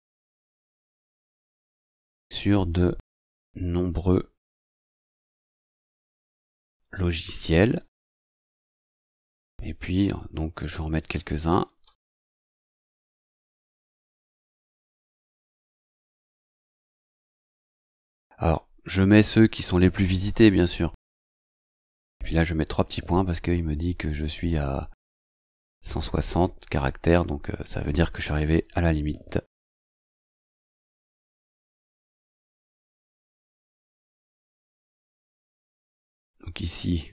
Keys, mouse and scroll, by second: 0.0-12.1 typing, 13.9-20.2 typing, 23.2 shift+;, 24.4 shift+;, 27.5 click, 28.6 BackSpace, 29.8 space, 33.0-33.4 scroll down 2, 34.6 scroll down 1, 35.4-35.7 scroll down 2, 36.8 click.